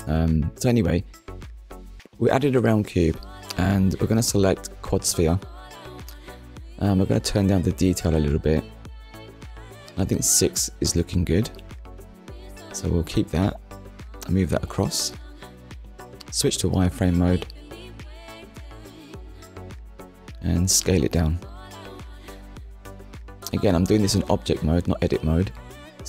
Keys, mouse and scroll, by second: 2.6 click, 3.8 click, 4.7 click, 8.2 click, 13.4 click, 16.7 click, 17.4 shift+middle click, 18.2-18.9 scroll up 2, 19.1 shift+middle click, 23.3 click, 23.9 shift+middle click, 24.4 scroll up 1, 25.0 shift+middle click.